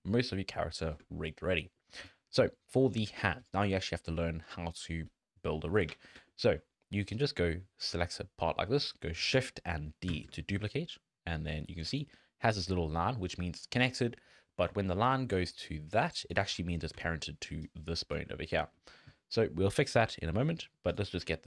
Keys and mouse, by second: 0.2 shift+middle click, 0.9 shift+middle click, 1.6 middle click, 2.3 shift+middle click, 6.3 shift+click, 7.2-9.3 drag, 10.1 shift+d, 14.7-18.2 typing, 15.0 click, 15.5 click, 16.1 click, 17.6 click, 20.0 n, 21.0 click, 21.1 n.